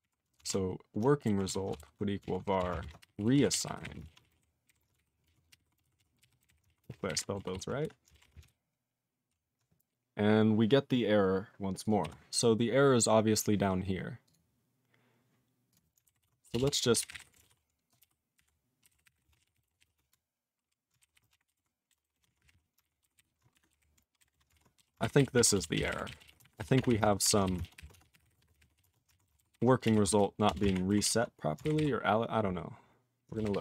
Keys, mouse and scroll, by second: 0.0 alt+f, 0.4 alt+f, 1.5 ctrl+s, 1.8 alt+b, 2.2 alt+f, 2.6 alt+f, 2.8-7.0 typing, 4.7 ctrl+n, 5.0 alt+b, 5.2 alt+d, 7.1 ctrl+g, 7.1 ctrl+e, 7.6 ctrl+s, 12.0 q, 12.4-13.7 scroll down 14, 14.2 click, 14.3 click, 15.7 click, 15.7 click, 16.2 ctrl+s, 16.5 Return, 16.6 Return, 16.7-30.7 typing, 21.0 ctrl+b, 21.1 ctrl+b, 23.0 ctrl+b, 23.2 ctrl+b, 24.5 ctrl+e, 25.0 ctrl+b, 25.2 ctrl+b, 25.4 ctrl+e, 27.6 ctrl+a, 27.8 ctrl+o, 31.1 ctrl+s, 31.6 ctrl+b, 31.8 ctrl+b, 33.1-33.6 typing.